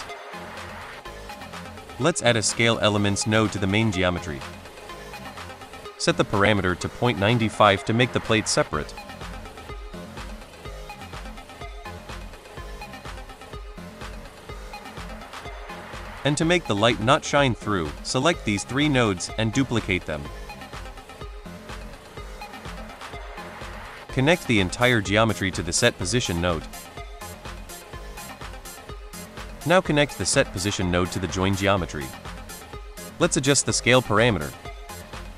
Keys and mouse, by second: 0.2-0.6 middle drag, 1.2 middle click, 1.5 click, 1.8 shift+a, 4.4 middle click, 5.0 click, 5.6 middle click, 6.1-7.7 drag, 13.1 middle drag, 17.3 middle drag, 17.9 middle drag, 19.1-19.9 drag, 20.3 middle drag, 21.1 shift+d, 22.6 click, 23.1 click, 23.5 middle drag, 24.7 click, 27.0 middle click, 27.7 middle click, 28.4-30.2 drag, 31.0 middle click, 32.3 middle drag, 33.0-34.3 drag.